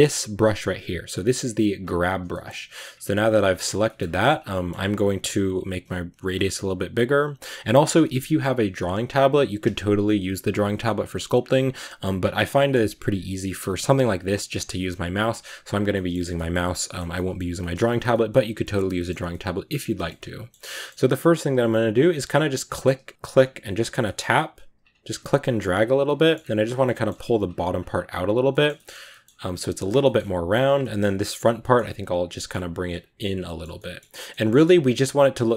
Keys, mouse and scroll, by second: 1.7 click, 2.4-3.4 middle drag, 3.4 click, 3.7 shift+middle click, 4.2 scroll down 2, 4.5-6.3 middle drag, 6.3-7.9 drag, 7.9-13.5 middle drag, 13.5 scroll up 1, 13.6-16.0 middle drag, 16.0 scroll down 1, 16.2-17.2 middle drag, 17.2 scroll down 1, 17.4-19.0 shift+middle drag, 19.0 scroll up 1, 19.2-21.4 middle drag, 21.4-23.9 drag, 23.9 scroll up 1, 24.0-25.3 middle drag, 25.3 click, 26.1 middle click, 26.2-26.5 scroll up 1, 26.5 click, 26.9 middle click, 27.3-28.5 drag, 28.5 middle click, 29.3 click, 29.6 middle click, 30.4 click, 30.7-32.7 middle drag, 32.7 click, 33.2-33.6 scroll down 2, 33.3 middle click, 33.6 middle click, 34.2 scroll down 1, 34.3-35.5 middle drag.